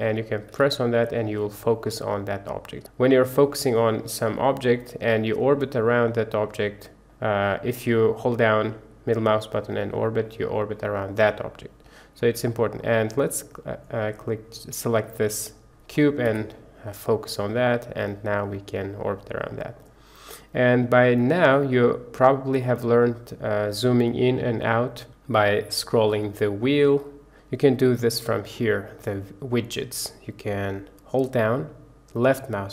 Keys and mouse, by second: 0.4 KP_Decimal, 2.8 click, 4.2-5.9 drag, 5.9-7.3 middle drag, 7.7 middle click, 8.4-12.5 middle drag, 16.2 KP_Decimal, 17.2-19.7 middle drag, 20.3-21.5 middle drag, 21.9-22.7 middle drag, 22.7 click, 22.8 click, 31.4-32.7 drag.